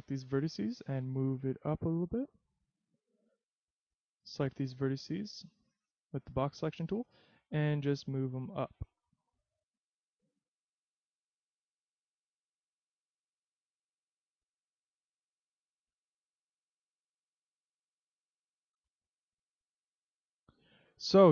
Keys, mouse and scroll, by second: 0.8 click, 3.7 a, 4.4 b, 7.8 click, 10.4 e, 11.8 click, 12.1 s, 13.4 click, 14.7 click, 16.0 click, 17.7 e, 20.3 click.